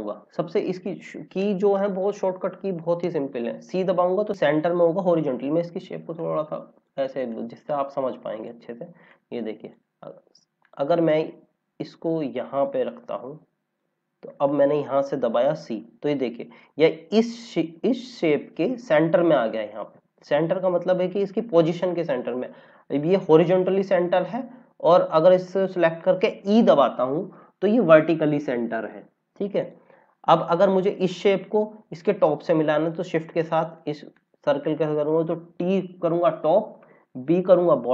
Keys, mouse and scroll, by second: 4.4 click, 10.0 scroll down 1, 10.6 click, 11.4 scroll, 11.5-12.1 scroll up 1, 12.1 click, 15.3 c, 22.9 click, 25.5 click, 27.1 e, 27.8 click, 30.0 scroll up 1, 31.0 click, 34.1 click, 35.5 t.